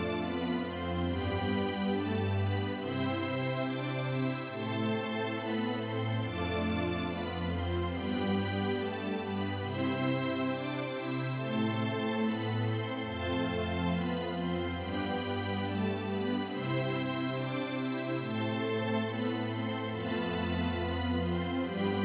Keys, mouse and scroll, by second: 9.7-11.4 drag, 15.7 click, 21.3 click.